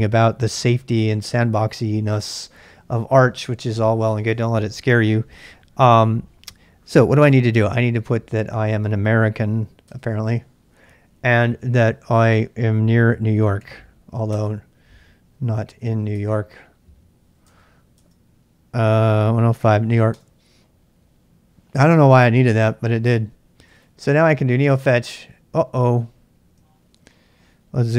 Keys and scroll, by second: 9.3 typing, 9.8 Return, 12.7-14.1 typing, 14.3 Return, 16.1 Return, 19.1-19.6 typing, 20.1 Return, 23.4-24.4 typing, 24.5 Return, 26.6-27.4 typing.